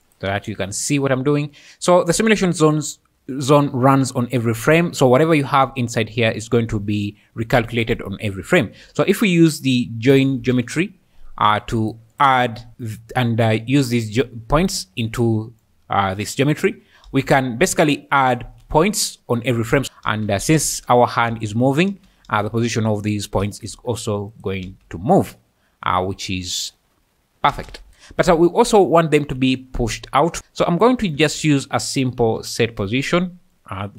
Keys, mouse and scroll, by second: 2.5 click, 8.8 shift+a, 12.1 click, 15.0 click, 15.6 click, 17.1 space, 19.7-22.4 typing, 23.4 space, 24.3 shift+middle click, 24.6 space, 27.6 space, 30.6 click, 31.0 shift+a.